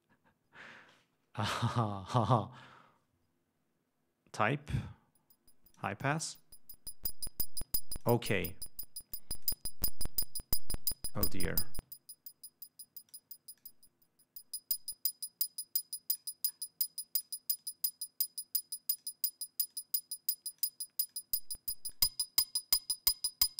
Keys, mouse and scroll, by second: 4.9-6.2 drag, 6.5-8.4 drag, 9.3-9.8 drag, 11.7-13.5 drag, 13.8-16.6 drag, 17.2-17.6 drag, 17.8-19.4 drag, 19.9-21.0 drag, 21.3-22.1 drag, 22.4-23.5 drag.